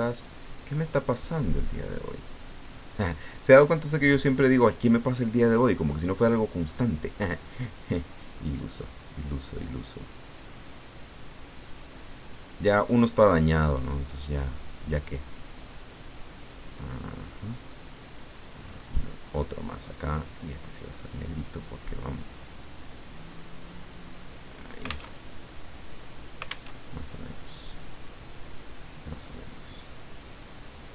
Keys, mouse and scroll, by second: 0.1 click, 0.6 click, 2.0 click, 5.9 click, 7.2 click, 9.8-12.3 drag, 13.5 click, 16.0-17.7 drag, 18.6 click, 20.2-21.5 drag, 22.6-24.7 drag, 25.2 alt+Tab, 26.7 alt+Tab, 29.3 click.